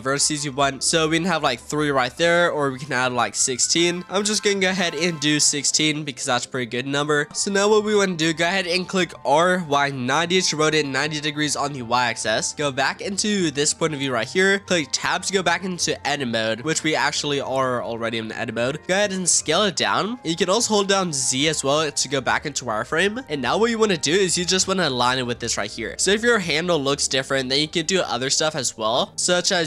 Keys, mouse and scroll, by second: 0.4-2.8 drag, 3.6-5.9 drag, 6.9 click, 7.8-9.2 right drag, 9.2 r, 11.1-12.9 middle drag, 12.9 click, 14.3-15.0 scroll up 2, 15.0 Tab, 15.8 Tab, 18.1-19.1 scroll up 2, 19.1 s, 20.1-21.3 shift+middle drag, 21.3 z, 23.2 shift+middle click, 23.3-23.8 scroll up 1, 23.8-26.5 shift+middle drag, 29.2-29.6 scroll up 1.